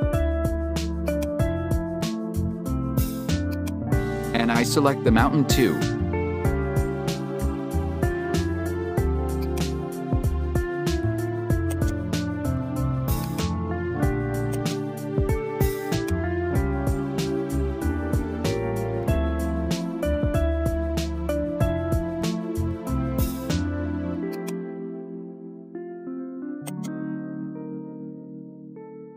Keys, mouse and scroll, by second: 1.1-5.2 drag, 9.4 click, 12.1 right click, 13.1 click, 14.5 right click, 15.9-17.4 drag, 17.4 Tab, 18.3 a, 20.4 s, 23.3 Tab, 24.3 click, 26.7 right drag, 27.4 s, 28.4 Tab, 28.9 a.